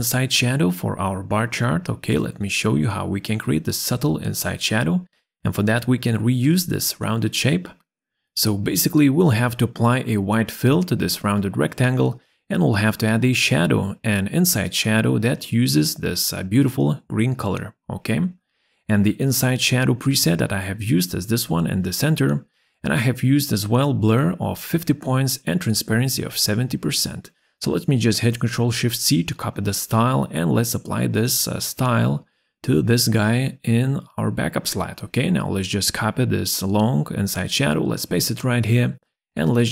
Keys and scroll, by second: 28.4 ctrl+shift+c, 37.5 ctrl+v.